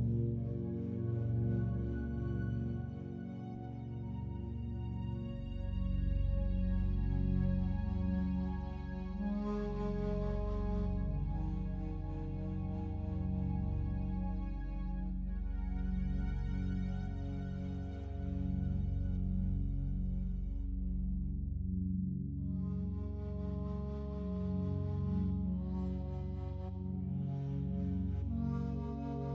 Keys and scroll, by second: 9.0 shift+Page_Up, 21.6 Delete.